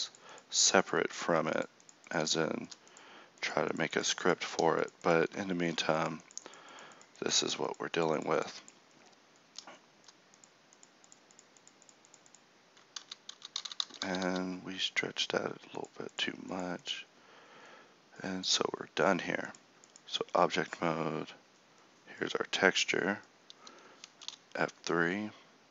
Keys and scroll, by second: 13.0 ctrl+z, 13.3 ctrl+z, 13.6 ctrl+z, 13.8 ctrl+z, 14.0 ctrl+z, 14.2 ctrl+z.